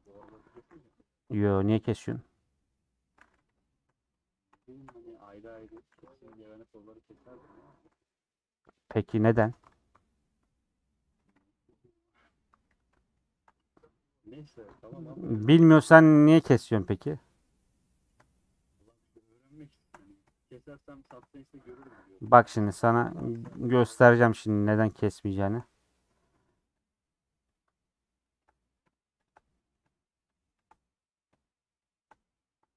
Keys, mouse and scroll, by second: 0.0 middle click, 0.2 Tab, 0.8 ctrl+a, 1.1 Tab, 2.3 u, 3.8 /, 4.3-5.6 middle drag, 5.6 3, 5.9 2, 6.0 alt+click, 6.7-9.4 middle drag, 13.0 ;, 13.5-14.5 middle drag, 14.5 3, 15.0 click, 16.1-18.7 middle drag, 18.7 shift+click, 19.4 shift+click, 19.9 middle click, 20.7 shift+click, 21.6 shift+click, 21.8 middle click, 22.8 shift+click, 23.3 ctrl+z, 23.6 shift+click, 24.5 shift+click, 25.3 shift+click, 25.6-26.7 middle drag, 26.7 shift+Left, 27.5 shift+Left, 28.3 shift+Left, 28.6 middle click, 29.3 shift+Left, 29.4 middle click, 30.3 shift+Left, 30.8-31.9 middle drag, 31.9 shift+click, 32.2 middle click.